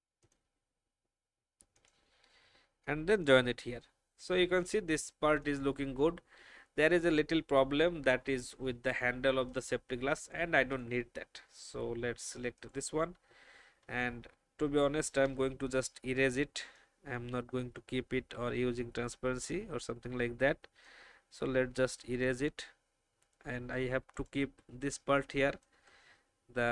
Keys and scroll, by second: 5.1 alt+v, 15.6 shift+e, 25.0 space.